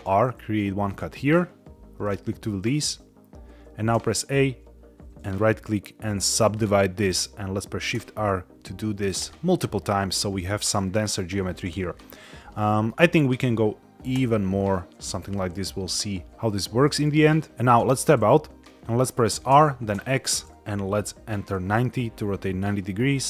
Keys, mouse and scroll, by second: 0.7 click, 1.9 right click, 3.9 a, 5.1-6.4 right drag, 7.8 shift+r, 9.1 shift+r, 11.5 middle click, 12.1 scroll up 1, 12.4 shift+middle click, 14.0 shift+r, 17.8 Tab, 18.7 middle click, 18.7 scroll down 3, 19.4 r, 19.8 x, 21.4 KP_9, 21.4 KP_0.